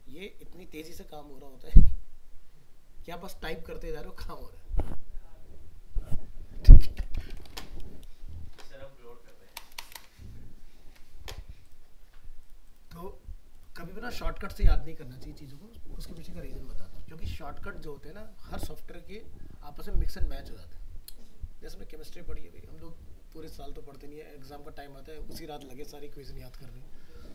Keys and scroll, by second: 9.5 ctrl+alt+0, 10.9 alt+Tab.